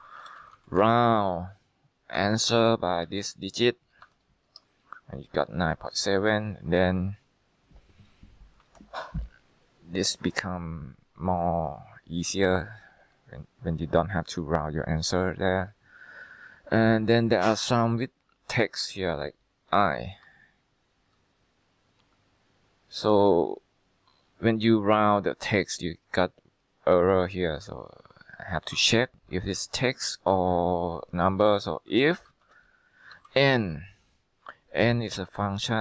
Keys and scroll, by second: 0.0-4.6 typing, 8.7 Escape, 17.0 Escape, 20.0 typing, 20.2 Return, 29.9 typing, 31.8-33.7 typing, 35.5 BackSpace.